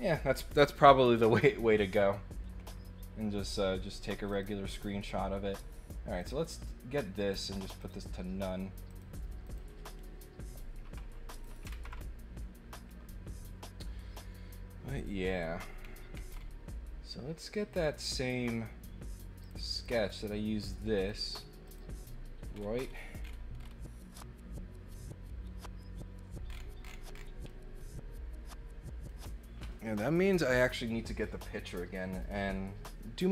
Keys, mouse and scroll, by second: 4.3 click, 4.6 right click, 6.2 click, 7.3 click, 7.7 click, 8.8 click, 9.4 click, 11.4 click, 15.8-16.1 scroll down 2, 16.2 scroll up 1, 17.7 click, 19.4 click, 19.8 click, 20.9 click, 21.6 click, 22.5 scroll up 1, 22.7 scroll down 1, 22.8-23.7 scroll up 4, 26.4-27.2 scroll down 6, 27.5-29.0 middle drag.